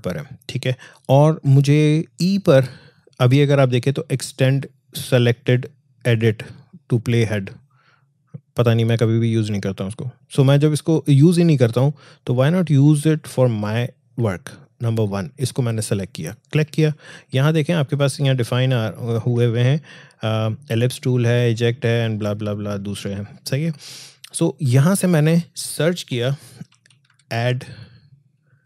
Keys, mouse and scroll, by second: 14.7 click, 24.8 click.